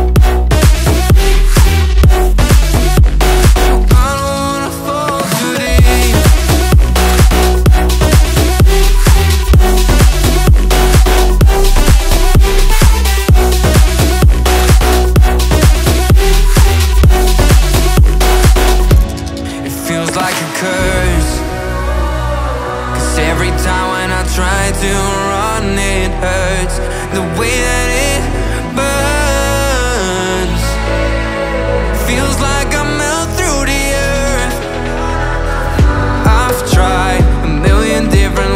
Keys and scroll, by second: 0.0-0.4 typing, 0.8 Escape, 4.3 ctrl+g, 4.5 Up, 8.8 space, 10.1 r, 21.2 Delete, 23.6 Up, 24.9 o, 30.2 space, 32.3 alt+Right, 33.3 Up, 37.3 Up, 38.3 Down.